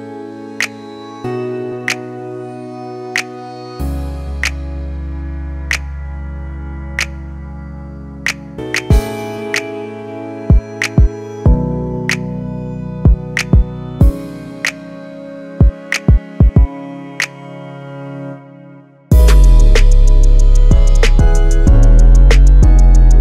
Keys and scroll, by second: 6.2 Escape, 9.7 Escape, 19.3-23.2 typing.